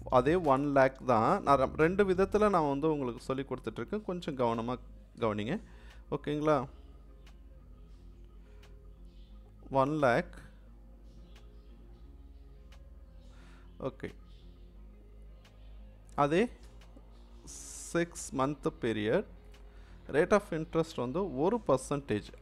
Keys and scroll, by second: 0.1-1.1 typing, 5.2 0, 16.6 6.